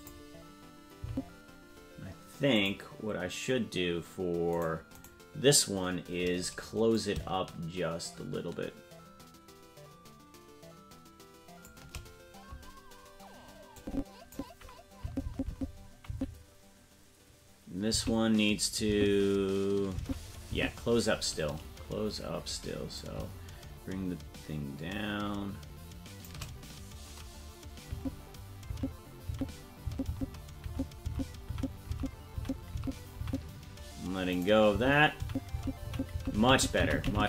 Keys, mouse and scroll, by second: 1.0 Right, 2.5-4.7 drag, 5.0 right click, 6.9-11.7 shift+drag, 13.7 click, 15.0 Left, 15.2 Left, 15.5 Left, 16.1 Right, 17.9 Left, 18.9 Right, 20.0 Left, 20.5 Right, 22.9-26.3 shift+drag, 27.9 Left, 28.7 Right, 29.3 Right, 29.9 Left, 30.1 Left, 30.7 Right, 31.1 Left, 31.5 Right, 31.9 Left, 32.4 Right, 32.7 Left, 33.2 Right, 34.3 right click, 34.7 Left, 35.2 Right, 35.5 Left, 35.9 Right, 36.1 Left, 36.4 Right, 36.5 Left, 36.7 Right, 36.8 Left, 36.9 Right, 37.1 Left, 37.2 Right.